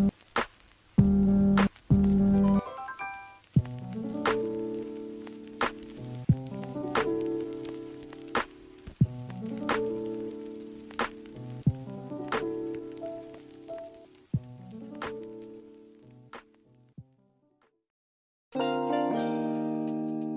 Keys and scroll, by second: 0.1 scroll up 1.